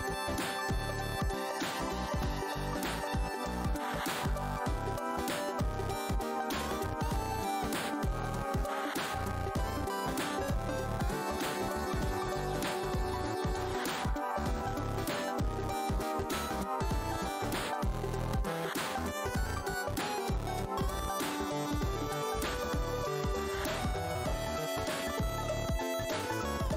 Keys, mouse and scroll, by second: 0.0-0.5 alt+scroll, 0.6 w, 1.5 click, 5.0 click, 9.9 scroll down 1, 9.9 z, 10.8 click, 11.4-12.6 scroll up 2, 13.2 alt+w, 13.9 click, 14.2 shift+right click, 14.7 shift+Right, 16.3 shift+right click, 18.5 shift+w, 19.4 alt+click, 20.2 right click, 20.8 click, 21.5 ctrl+right click, 23.9 click, 24.0-24.7 scroll down 1, 24.8 w.